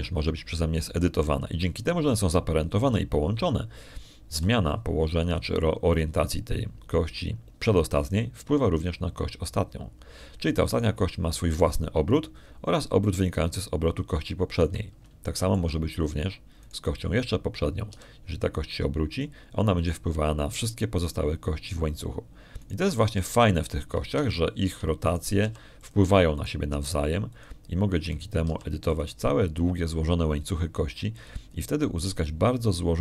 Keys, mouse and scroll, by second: 1.6 right click, 6.2 r, 8.0 click, 12.6 right click, 14.9 right click, 16.8 shift+middle click, 17.2 shift+click, 18.5 right click, 19.8 r, 21.0 click, 24.5 right click, 24.9 r, 25.6 click, 26.2 shift+click, 26.9 shift+right click, 27.3 shift+r, 27.6 shift+click, 28.2 shift+right click, 28.6 shift+r, 29.2 shift+click, 30.0 shift+right click, 30.3 shift+r, 30.8 shift+click, 31.2 shift+middle click.